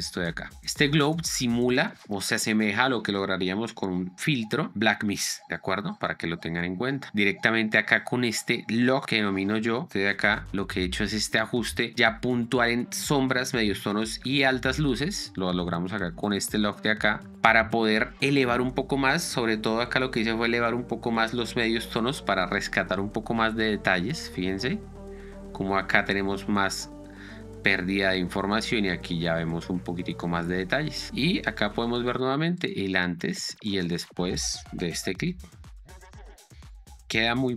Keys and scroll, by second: 9.4 ctrl+f, 10.0 Escape, 10.6 ctrl+d, 25.8 ctrl+d, 28.9 ctrl+d, 35.2 p, 35.6 space.